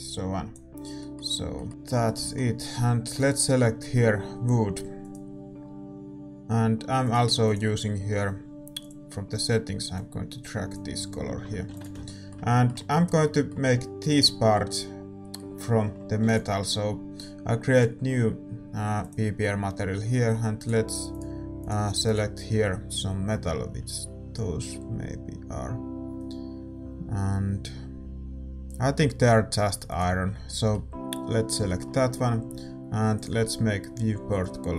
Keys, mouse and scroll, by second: 0.0 click, 0.9-4.7 middle drag, 3.2-12.0 drag, 11.1-17.8 middle drag, 11.4 a, 12.0 ctrl+s, 17.8 ctrl+s, 17.8-29.9 drag, 21.6 middle click, 30.4-34.4 middle drag, 34.4-34.7 drag.